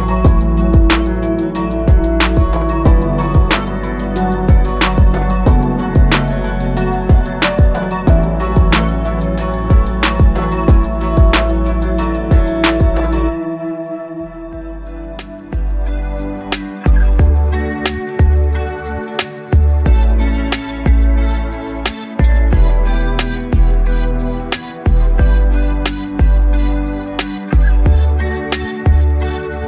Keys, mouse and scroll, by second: 0.2 scroll down 2, 0.7 click, 1.3-1.7 scroll down 2, 4.1-6.9 drag, 7.1 scroll down 2, 7.4 alt+click, 8.1-8.5 scroll up 3, 8.7 alt+click, 9.2 shift+right click, 10.2-10.5 scroll up 3, 10.7 alt+middle click, 11.1-12.3 alt+drag, 12.5-13.0 scroll down 3, 13.2 alt+middle click, 13.5 scroll down 1, 14.7 scroll up 2, 15.3 click, 18.2-25.4 drag, 25.7 alt+scroll down 1, 26.0 alt+click, 26.3 alt+middle click, 26.6 alt+scroll up 1, 26.9 alt+middle click, 27.6 click, 28.4 click.